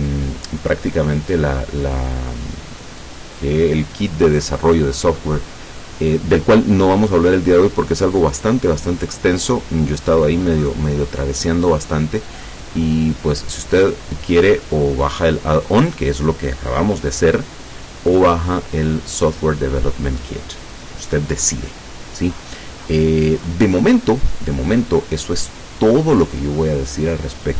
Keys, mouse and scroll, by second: 8.5 click, 13.9 click, 22.4-24.3 scroll up 6, 24.3 click.